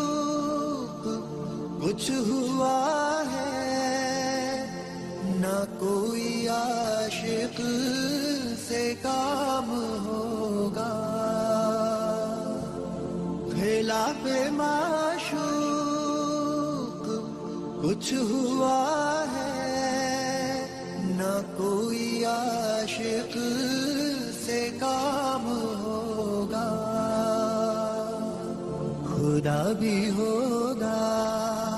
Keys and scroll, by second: 1.4 F2, 4.9 F4, 7.8 ctrl+g, 9.1 shift+Page_Down, 9.8 alt+c, 9.9 alt+w, 10.3 p, 12.1 F2, 16.1 space, 16.5 F4, 24.1 Escape, 31.4 F2.